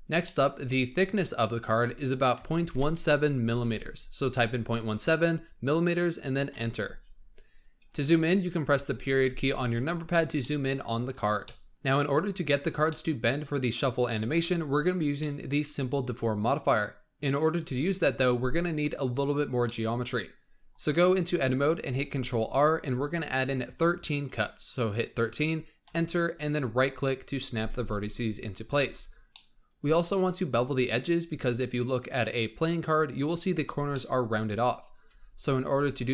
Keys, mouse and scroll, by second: 0.2-0.5 middle drag, 0.5-1.5 scroll up 4, 1.5-3.6 drag, 3.6 m, 7.8-8.7 scroll up 4, 8.7 KP_Decimal, 10.1 scroll down 1, 10.3-11.0 middle drag, 11.0-11.4 scroll up 3, 11.4-11.7 middle drag, 12.6 scroll down 1, 12.8-14.1 middle drag, 14.1 scroll up 2, 15.2-17.6 middle drag, 17.6 Tab, 19.6-21.9 middle drag, 21.9 ctrl+r, 28.7 Tab, 29.2-32.4 middle drag, 33.9-35.0 middle drag, 35.0 Tab, 35.7 Tab.